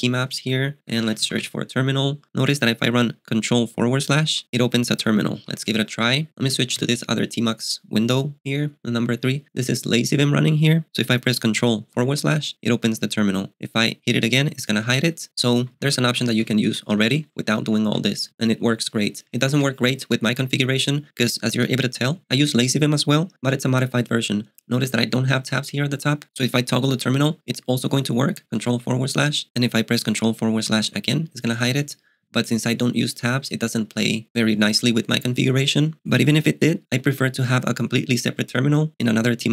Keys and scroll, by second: 0.5-1.9 typing, 4.2 Up, 5.5 ↻, 6.8 ctrl+b, 11.9 ctrl+/, 14.3 ctrl+/, 14.9 ctrl+/, 15.1 ctrl+/, 15.4 ctrl+/, 15.6 ctrl+/, 15.9 ctrl+/, 16.2 ctrl+/, 16.7 ctrl+/, 17.0 ctrl+/, 17.2 ctrl+/, 17.3 ctrl+/, 17.4 ctrl+/, 17.7 ctrl+/, 17.9 ctrl+/, 18.3 ctrl+/, 19.5 ctrl+b, 19.8 i, 28.5 ctrl+/, 30.6 ctrl+/.